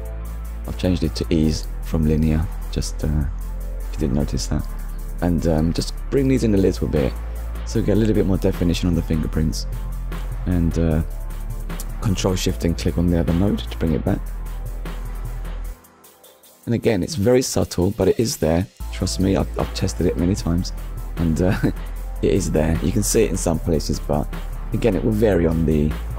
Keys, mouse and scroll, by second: 0.4 click, 1.6 click, 6.1 click, 9.5-9.8 scroll down 1, 10.1 middle click, 11.2 ctrl+shift+click, 12.1 middle click, 12.9-13.3 scroll up 1, 14.0 middle click, 15.0 middle click, 16.9-17.3 scroll down 1, 17.5 shift+middle click, 20.1 middle click, 23.8 scroll down 1, 24.0 middle click, 24.6 scroll up 1.